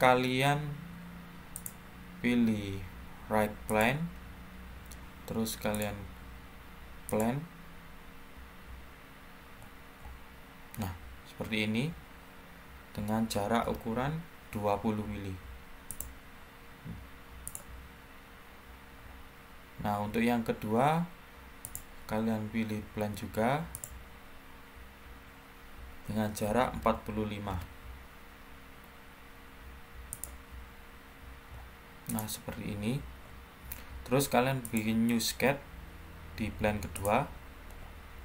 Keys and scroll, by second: 12.9-13.5 typing, 19.1-19.8 typing, 26.4-26.7 typing, 27.4 Return.